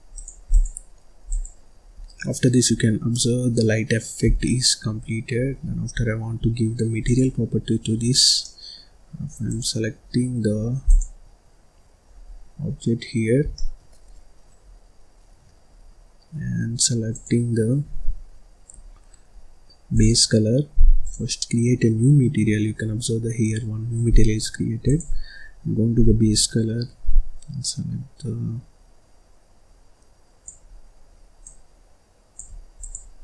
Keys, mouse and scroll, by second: 0.1 click, 0.4-1.9 drag, 1.9 scroll down 1, 2.2 middle click, 2.7-3.1 scroll up 1, 3.1-4.3 middle drag, 4.3 scroll down 1, 4.4 middle click, 4.9-5.9 scroll up 5, 5.9-7.0 scroll down 4, 7.0 click, 7.5-7.9 scroll down 3, 7.9-8.4 scroll up 1, 8.4-9.8 middle drag, 9.8 click, 11.5 click, 12.2-12.6 scroll down 3, 12.6-12.9 scroll up 2, 13.4 scroll down 1, 13.5-15.9 middle drag, 15.9-17.1 scroll up 2, 17.1 click, 18.8-19.3 scroll down 4, 19.3-19.9 scroll up 4, 19.9 click, 21.0 click, 22.0-23.4 scroll up 8, 24.1-24.8 scroll down 2, 24.8 click, 32.7 click, 33.1 scroll up 1.